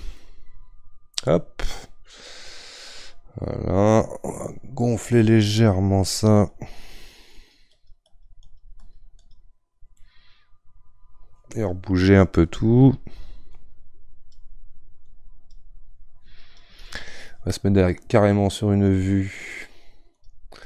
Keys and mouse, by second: 0.1-5.0 middle drag, 5.0-10.0 drag, 10.0-12.6 middle drag, 12.6-18.9 drag.